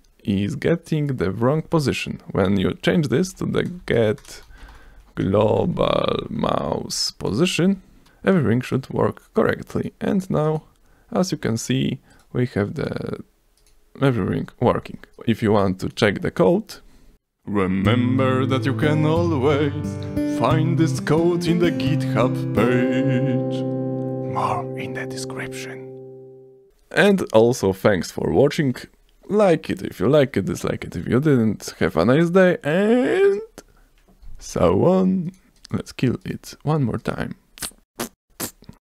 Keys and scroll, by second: 3.2-5.9 typing, 6.4 ctrl+space, 7.3 space, 7.6 ctrl+s, 8.5 s.